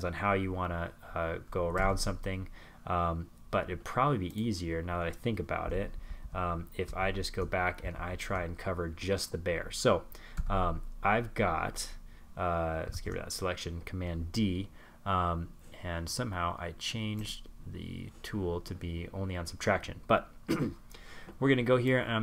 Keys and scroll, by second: 3.5 super+z, 4.2 alt+super+z, 4.8 alt+super+z, 5.9 alt+super+z, 10.7 super+d.